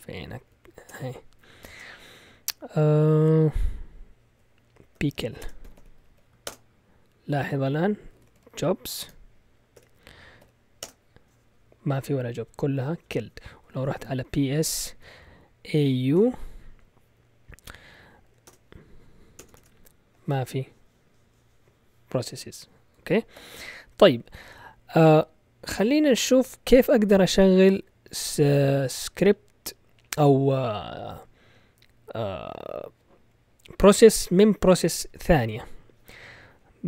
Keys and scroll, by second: 0.1 Left, 0.9-2.1 typing, 4.8-6.5 typing, 7.9-10.9 typing, 13.7-16.1 typing, 18.4-19.6 typing, 19.6 Return, 23.3 ctrl+l.